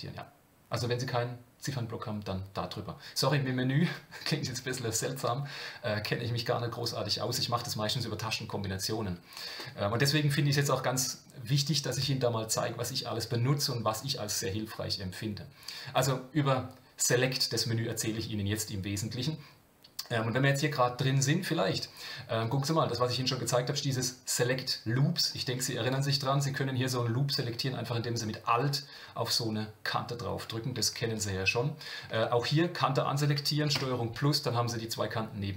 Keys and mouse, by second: 17.4-21.3 drag, 22.4-25.2 drag, 26.3-28.1 middle drag, 31.1 alt+click, 33.7 ctrl+KP_Add.